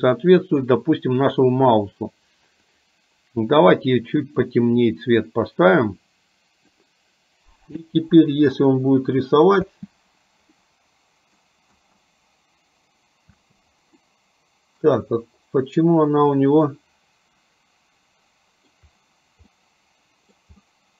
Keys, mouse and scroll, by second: 2.8 click, 7.9 space, 9.9 space, 10.9 middle click, 13.6 space, 14.3 middle click, 16.9-19.1 middle drag, 19.7-20.7 middle drag, 20.8-20.9 middle drag.